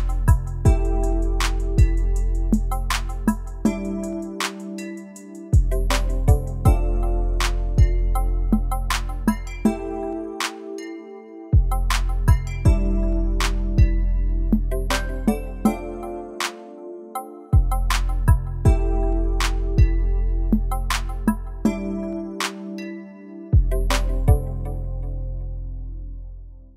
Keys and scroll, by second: 4.1 BackSpace, 12.4 i, 14.4 v, 15.1 g, 23.2 v.